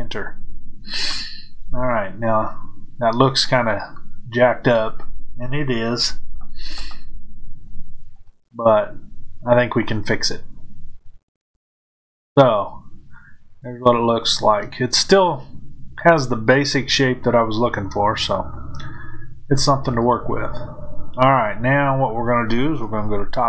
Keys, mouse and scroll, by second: 3.8-8.1 middle drag, 8.1 click, 12.9-15.1 middle drag, 16.9-19.8 middle drag, 19.8 click.